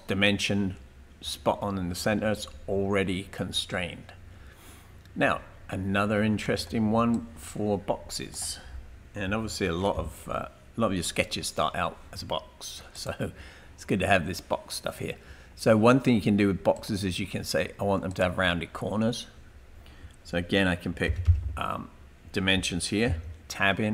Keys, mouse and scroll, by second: 0.1-0.8 typing, 2.6-3.4 typing, 6.4 right click, 7.1 click, 9.3 Delete, 12.9 click, 18.1 click, 21.3 typing, 23.0 Tab.